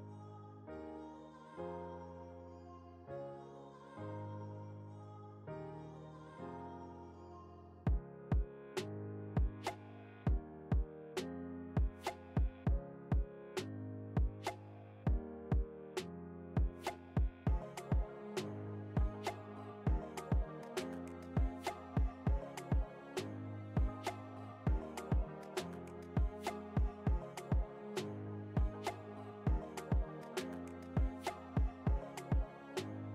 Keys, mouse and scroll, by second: 0.6 scroll down 1, 1.8 click, 5.5 click, 7.0 ctrl+t, 7.8-10.8 drag, 13.9 shift+Return, 15.0 alt+shift+scroll down 1, 16.2 shift+click, 16.6 alt+shift+scroll down 1, 17.6 alt+shift+scroll up 1, 19.2-24.4 shift+drag, 25.0 ctrl+s, 26.2 t, 26.7 click, 30.1 shift+c, 31.4-33.1 typing.